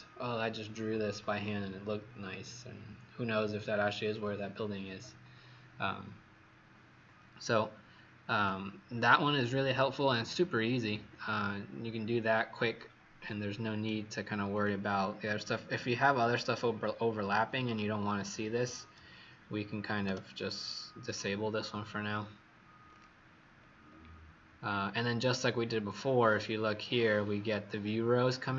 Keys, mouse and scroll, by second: 8.2 click, 8.9 right click, 14.4 click, 15.0-16.4 scroll down 6, 17.5 click, 21.0 click, 23.5-25.5 scroll down 3, 25.5 scroll down 2, 26.1 scroll up 5, 26.9-28.5 scroll up 4.